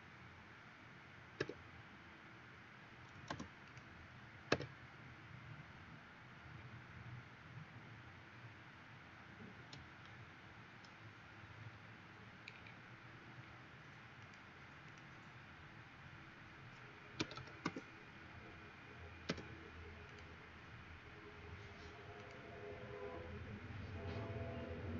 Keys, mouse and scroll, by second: 1.4 q, 3.7 click, 4.6 q, 6.7 middle click, 11.8 scroll up 4, 12.7 middle click, 14.3 click, 14.9 click, 16.9-17.9 typing, 19.2 m, 20.2 click, 24.1 middle click.